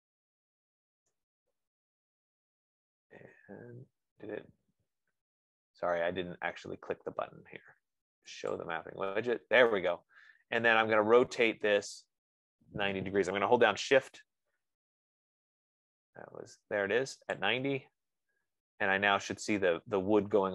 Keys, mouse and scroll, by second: 2.1-2.9 scroll, 9.1 click, 14.1 click, 17.8 shift+click, 18.5-19.7 scroll.